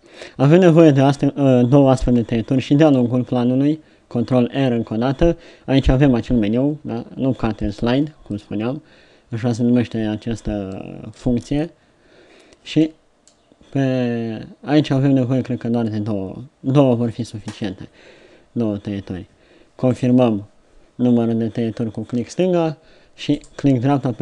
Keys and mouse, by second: 2.9 ctrl+r.